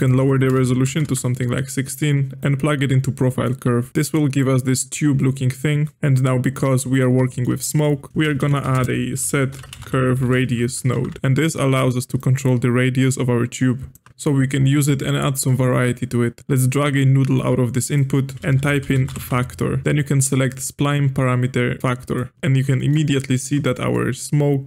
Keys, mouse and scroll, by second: 0.0-3.9 drag, 3.9-5.9 middle drag, 5.9 g, 6.9 click, 7.3 shift+middle click, 8.1 click, 9.8 space, 11.1 Down, 12.2-14.1 shift+drag, 14.1 middle click, 15.0-16.4 drag, 16.7-18.9 drag, 22.3-24.6 middle drag.